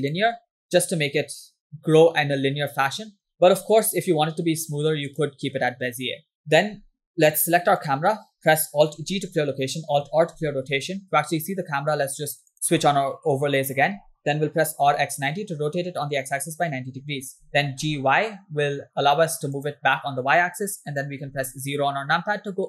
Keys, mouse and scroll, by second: 1.6-3.5 drag, 3.7 t, 6.4 click, 7.8 click, 9.4 alt+g, 10.7 alt+r, 12.6 click, 14.8 r, 17.5 g, 21.4 KP_0.